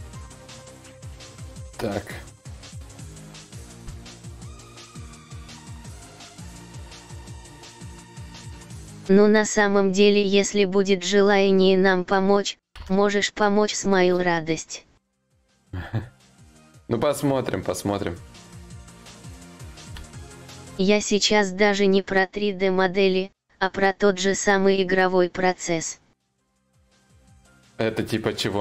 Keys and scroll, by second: 2.4 ctrl+z, 5.8 ctrl+z, 5.8 y, 12.4 ctrl+z, 13.9 ctrl+z, 19.5 ctrl+z, 22.2 ctrl+z, 26.4 ctrl+z.